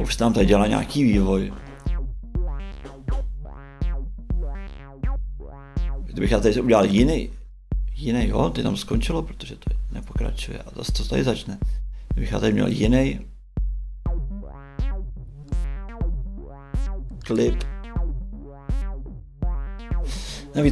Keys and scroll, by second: 5.5 shift+Right, 8.1 shift+Right, 11.3 shift+Right, 20.6 shift+Right.